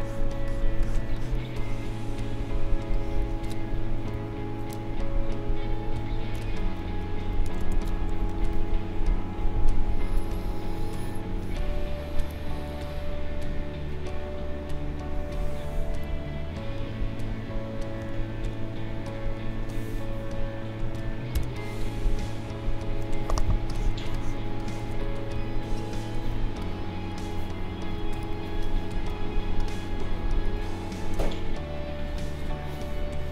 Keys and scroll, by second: 4.2 ctrl+0, 6.3 ctrl+0, 7.8 ctrl+0, 21.3 b, 22.3 ctrl+=, 23.3 space, 25.5 ctrl+=, 27.9 ctrl+=, 29.0 space.